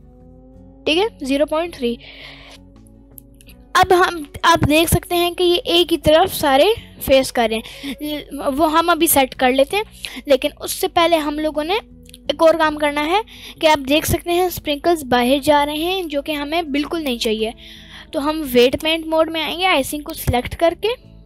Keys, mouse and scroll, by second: 2.1-2.7 scroll down 1, 3.5 scroll down 3, 4.1-4.5 scroll down 1, 4.5-4.9 middle drag, 4.5-4.9 scroll down 1, 6.9-7.6 scroll up 1, 7.6 scroll down 1, 7.8 scroll down 1, 8.6-9.5 middle drag, 9.8-10.4 scroll up 1, 13.6 middle click, 14.1 scroll up 1, 14.7-15.2 middle drag, 14.7 scroll up 1, 15.2-15.6 scroll down 2, 15.4-16.1 middle drag, 17.0 click, 17.7-18.2 scroll down 2, 20.7 click.